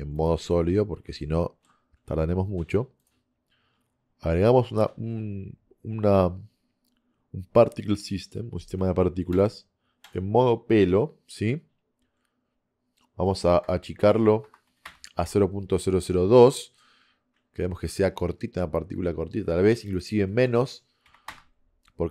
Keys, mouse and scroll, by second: 1.3 middle drag, 1.5 middle click, 1.7 middle click, 14.4 KP_0, 17.4 middle click, 17.8 middle click.